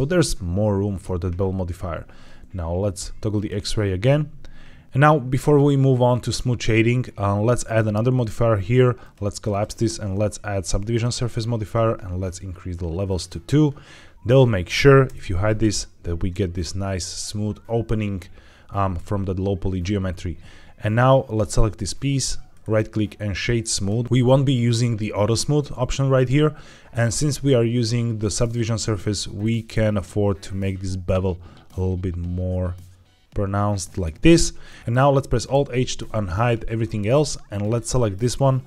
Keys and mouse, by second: 0.8 Tab, 3.2 click, 8.9 click, 9.4-10.9 drag, 13.0 click, 14.1 click, 14.9 h, 20.8 click, 22.5-23.8 right drag, 28.4 click, 29.3 shift+right click, 29.5-33.8 shift+drag, 34.6 click, 35.4 alt+h, 37.5 click.